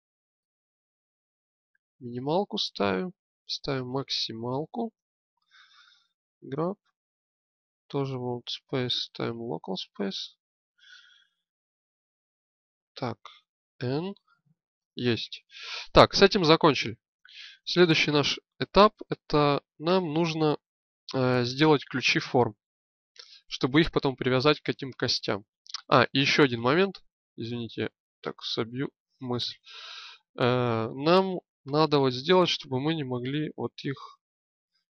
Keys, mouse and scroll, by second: 6.2 g, 8.1-9.7 drag, 10.6 g, 13.6 n, 29.6 click, 30.2-32.8 right drag, 32.8 g.